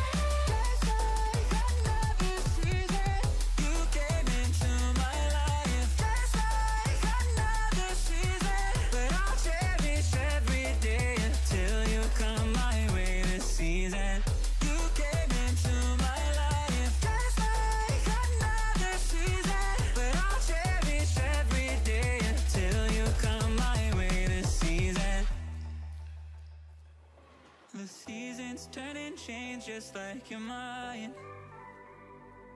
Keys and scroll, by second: 10.5 ctrl+z, 12.9 ctrl+=, 28.5 ctrl+-, 28.9 ctrl+0, 29.5 ctrl+=, 31.4 ctrl+i, 31.8 ctrl+=.